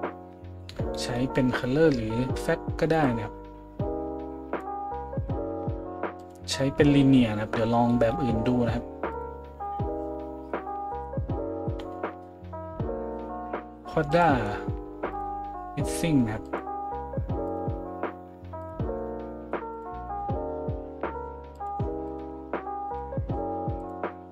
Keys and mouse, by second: 21.6 middle click, 22.1-24.3 drag.